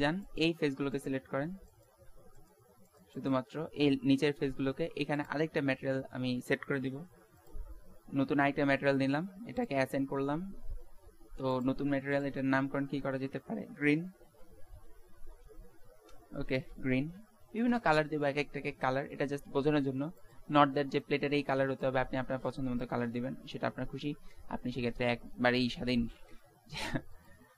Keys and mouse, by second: 26.9 ctrl+s.